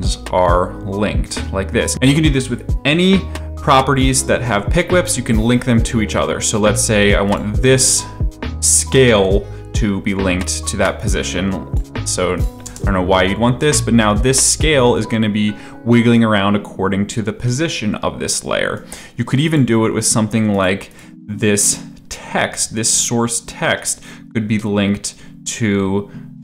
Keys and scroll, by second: 9.1 s, 12.6 space.